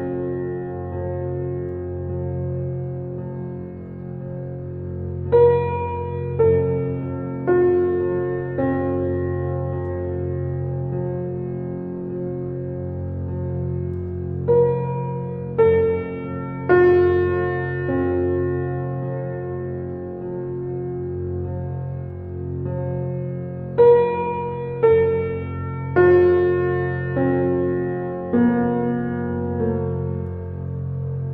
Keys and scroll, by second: 11.0 4, 11.2 5, 11.5 Return, 22.0 u, 30.9 shift+space.